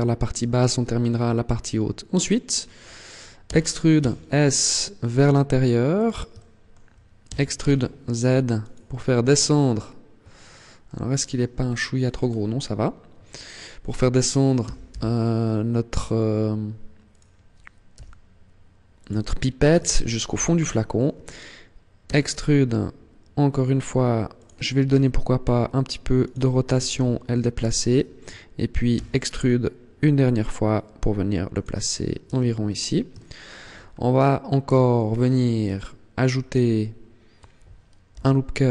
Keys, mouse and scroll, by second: 3.3 e, 5.8 click, 6.1 shift+middle click, 7.1 e, 8.7 click, 9.1-10.1 scroll down 7, 10.3 shift+middle click, 10.9-11.4 scroll down 2, 11.5-12.1 scroll up 6, 14.4 g, 17.1 click, 17.7 g, 18.9 click, 19.2 scroll down 1, 19.7 shift+middle click, 21.9 e, 24.3 click, 24.9 r, 26.1 click, 26.7 g, 27.4 click, 28.7 e, 31.4 click, 31.7-32.1 scroll down 2, 32.1 Tab, 32.9 shift+middle click, 33.6-33.9 scroll up 3, 34.5 Tab, 34.9-35.3 scroll up 2, 35.5 shift+middle click, 36.4 scroll up 2, 37.9 ctrl+r.